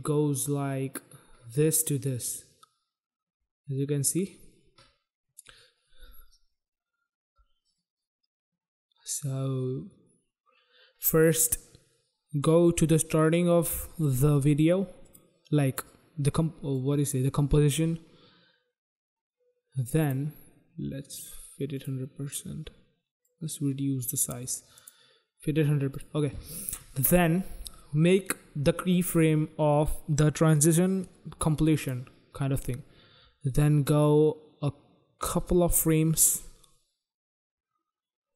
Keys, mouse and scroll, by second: 13.0 click, 15.0 click, 16.7 click, 20.0 click, 21.7 click, 23.2 click, 24.7 click, 24.8 click, 25.9 click, 31.7 click, 33.8 click.